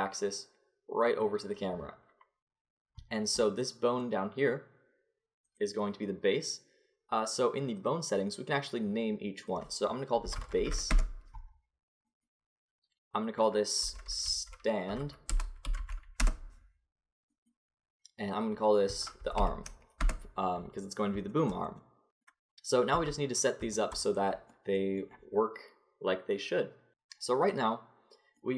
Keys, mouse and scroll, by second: 5.5-7.3 drag, 7.8-11.3 drag, 12.1-15.0 drag, 13.2 right click, 15.0 middle click, 17.3-19.1 right drag, 18.3-20.3 drag, 20.1 middle click, 21.3 middle click, 22.9 Tab.